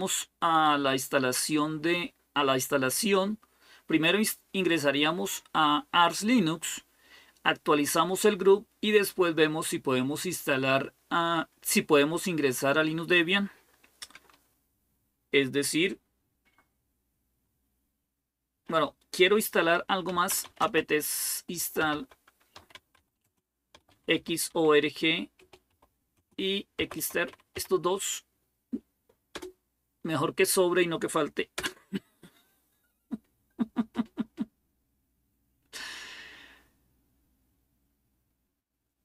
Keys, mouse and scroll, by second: 19.7-27.8 typing, 29.1 Return, 31.3 Return, 33.9 typing.